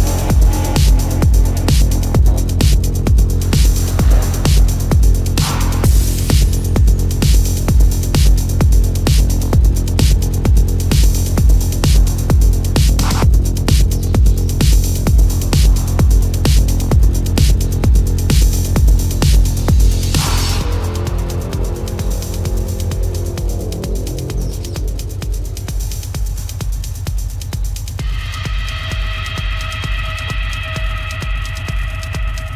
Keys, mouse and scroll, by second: 0.8 ctrl+alt+z, 7.8 ctrl+-, 8.6 ctrl+alt+z, 9.4 ctrl+alt+z, 10.5 ctrl+alt+z, 10.6 ], 11.7 ctrl+-, 16.2 ctrl+alt+z, 16.8 ctrl+-, 17.1 space, 19.8 ctrl+=, 20.5 ], 21.2 ], 21.8 ctrl+-, 22.6 ctrl+-, 25.7 ctrl+alt+z.